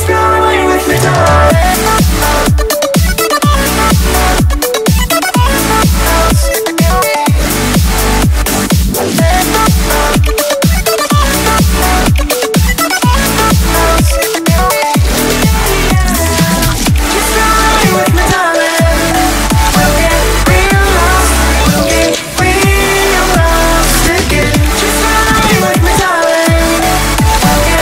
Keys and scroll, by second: 14.3 typing, 14.6 Return, 15.9 5, 17.5 6.